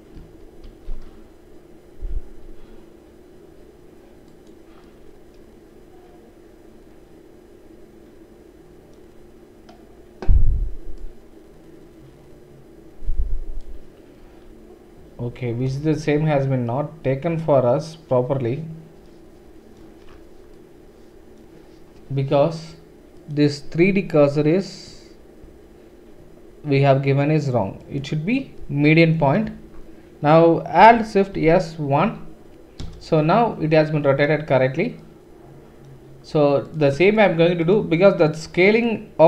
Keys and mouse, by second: 0.6 alt+shift+s, 7.4-14.2 right drag, 10.9-14.2 drag, 10.9-14.2 middle drag, 14.2 Escape, 15.9 ctrl+z, 28.8 click, 28.8 middle click, 28.8 right click, 30.3 click, 30.3 middle click, 30.3 right click, 30.9 alt+shift+click, 30.9 alt+shift+middle click, 30.9 alt+shift+right click, 31.3 alt+shift+s, 36.7 shift+click, 37.2 shift+click, 37.6 shift+middle click, 37.7 shift+right click, 38.3-39.2 shift+middle drag.